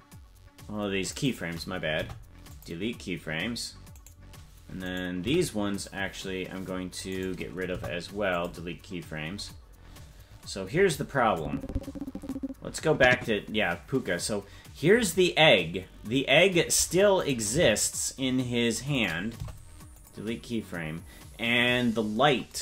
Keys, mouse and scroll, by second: 1.9 Delete, 3.9 right click, 4.8 right click, 5.2 c, 7.7 Delete, 9.3-9.8 scroll up 6, 9.8-10.2 scroll down 1, 11.4-14.3 drag, 11.4-12.4 scroll down 3, 17.1 right click, 17.5 c, 19.3 Delete.